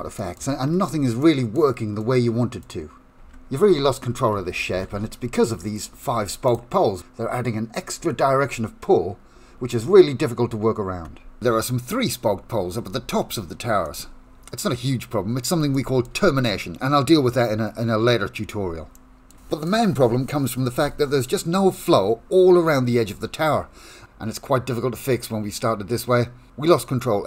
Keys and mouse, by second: 0.2 shift+middle click, 1.2 middle click, 1.9 middle click, 3.2 Tab, 4.4 ctrl+z, 4.6 ctrl+z, 4.9 ctrl+z, 6.1 1, 6.4 click, 13.8 click, 14.6 middle click, 15.7 shift+middle click, 18.9 shift+middle click, 19.4 middle click, 19.8 Tab, 20.8 Tab.